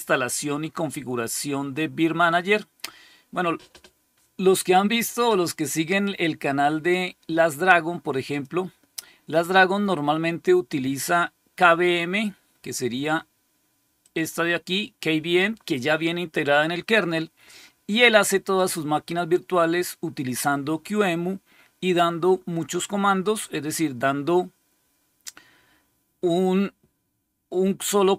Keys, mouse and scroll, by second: 8.2 click, 13.9 click, 18.4 click.